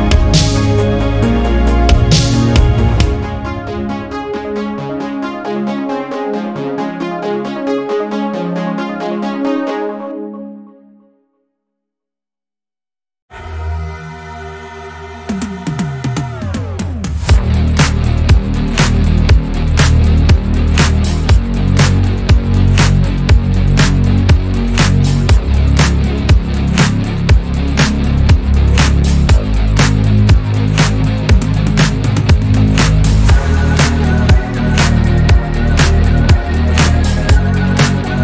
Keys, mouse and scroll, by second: 0.2 ctrl+KP_Add, 1.9 x, 3.0-4.1 middle drag, 4.1 Tab, 5.4 click, 5.6 click, 5.8 click, 6.7 KP_1, 7.6 Tab, 7.8 scroll up 1, 8.3 alt+z, 9.1 1, 9.5 click, 11.3 scroll down 1, 12.0 scroll down 9, 12.9 click, 13.7 scroll up 3, 14.3 click, 15.9 shift+middle click, 16.2 click, 16.7 Tab, 16.9 click, 17.9 Tab, 18.5 a, 19.2 alt+s, 22.2-24.2 middle drag, 24.2 KP_1, 25.0-25.9 scroll up 2, 25.9 z, 27.8 s, 30.8-32.3 scroll down 2, 32.3 Tab, 32.7 click, 33.1 click, 33.7 alt+z, 33.9-36.0 middle drag, 36.2 scroll down 4, 36.8 click, 37.3 KP_1, 37.8 scroll up 2, 38.1 alt+z.